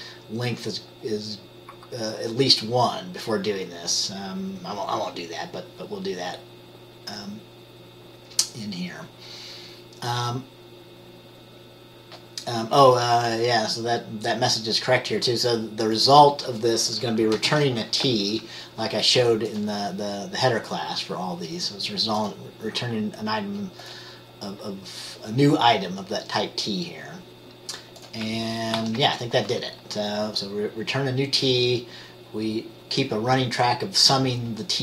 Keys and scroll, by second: 17.6 t, 28.9 ctrl+s.